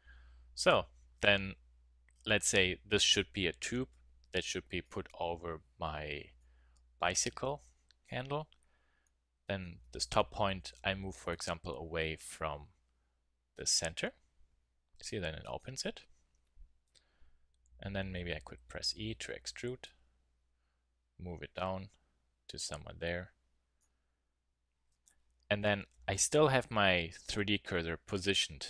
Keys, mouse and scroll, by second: 0.0 z, 0.6 a, 9.7 z, 11.3 click, 13.1 middle click, 13.2-16.3 middle drag, 16.3 KP_1, 16.7 z, 18.2 e, 28.1 middle click.